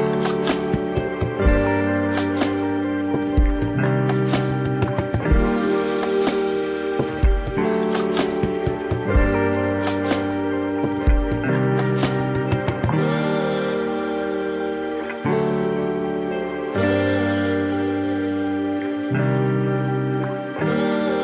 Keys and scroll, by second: 0.7 ], 2.7 ], 3.4 space, 5.1 space, 5.6 ], 6.8 ], 7.6 ], 11.0 space, 14.3 space.